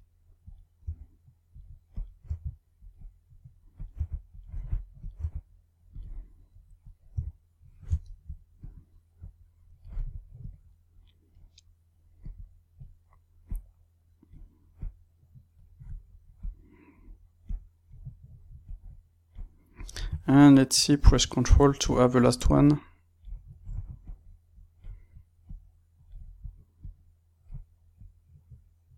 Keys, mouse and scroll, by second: 0.4 click, 0.8 g, 1.4 click, 2.2 g, 2.8 click, 3.7 click, 3.9 g, 4.9 click, 5.2 g, 6.0 click, 7.1 g, 7.8 click, 8.0 shift+middle click, 8.5-16.4 drag, 17.4-18.7 drag, 19.7-20.8 drag, 20.8 ctrl+right click, 21.5 shift+middle click, 22.4-24.2 drag, 25.4-26.8 drag, 27.9 click.